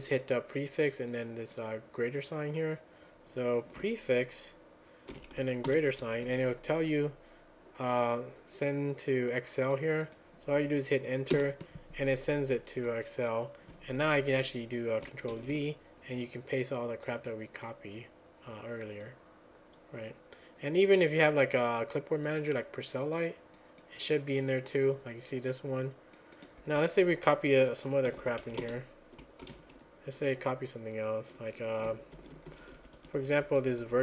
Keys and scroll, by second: 5.1 ctrl+a, 5.7 >, 11.4 Return, 15.4 ctrl+v, 27.9-29.0 typing, 29.5 ctrl+a, 29.8 Page_Up, 30.2 Page_Up, 31.7-34.0 typing.